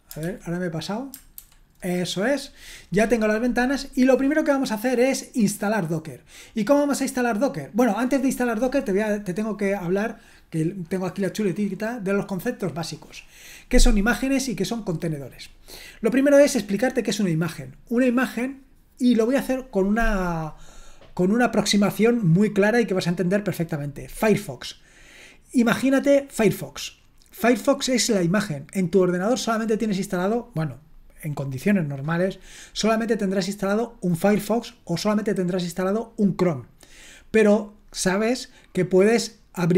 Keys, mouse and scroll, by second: 0.2 super+l, 1.4 shift+super+h, 4.5-5.8 scroll down 1, 5.8-6.1 scroll up 1, 6.1-7.2 scroll down 1, 7.2-8.6 scroll up 1, 8.6-12.6 scroll down 2, 12.6-39.7 scroll down 1.